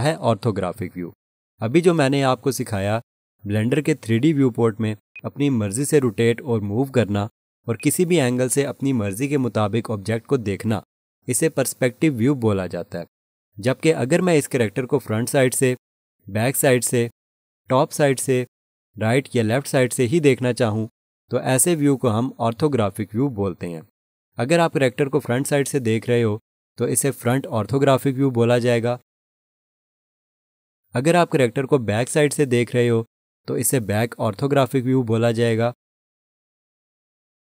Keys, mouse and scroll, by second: 5.1 alt+click, 7.7 alt+shift+click, 9.0 alt+click, 15.6 1, 16.8 ctrl+1, 18.4 7, 20.0 3, 25.8 1, 32.0 ctrl+1.